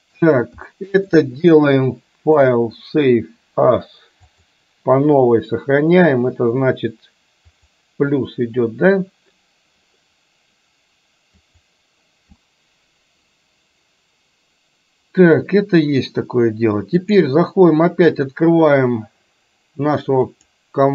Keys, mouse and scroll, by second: 0.8-1.2 shift+middle drag, 2.5-4.7 drag, 17.1-20.9 drag.